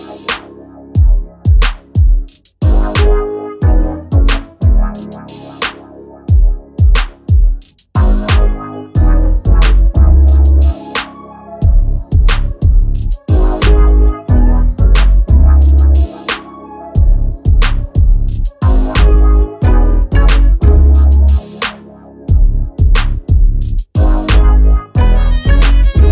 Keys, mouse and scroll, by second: 1.5 click, 2.4-3.4 right drag, 2.6 click, 12.5 a, 12.7 a, 12.8 a, 16.5 a.